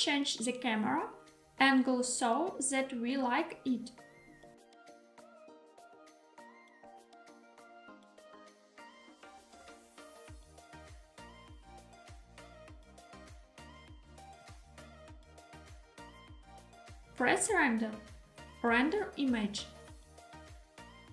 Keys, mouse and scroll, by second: 0.2 z, 3.8 click, 4.2 r, 5.7 x, 9.2 click, 9.5 g, 9.9 z, 16.7 click, 17.9-21.0 drag.